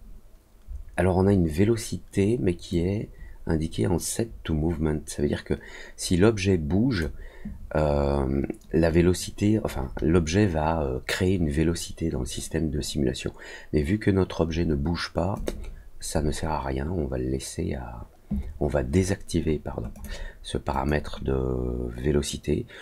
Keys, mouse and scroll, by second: 2.7-6.9 drag, 15.3 click, 19.9 click, 20.7 click.